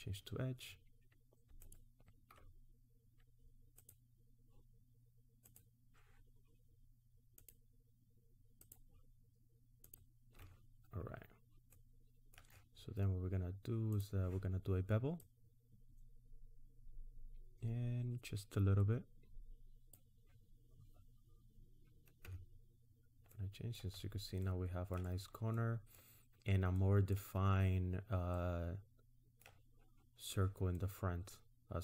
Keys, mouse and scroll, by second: 1.6 alt+click, 3.8 alt+shift+click, 10.8-11.3 scroll down 2, 11.3-11.7 scroll up 1, 11.7 middle click, 13.9 click, 15.2 click, 22.3 Tab, 22.9-24.0 scroll down 2, 23.3 middle click, 23.3-24.0 scroll up 1, 24.0-24.7 scroll down 3, 24.4 middle click, 25.6 middle click, 26.8 middle click, 28.3 middle click, 30.8 middle click.